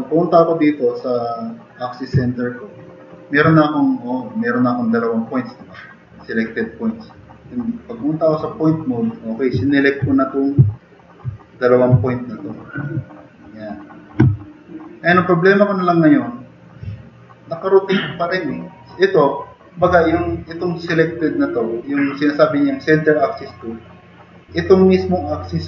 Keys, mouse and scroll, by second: 9.6 drag, 10.3 click, 11.0 click, 12.3 drag.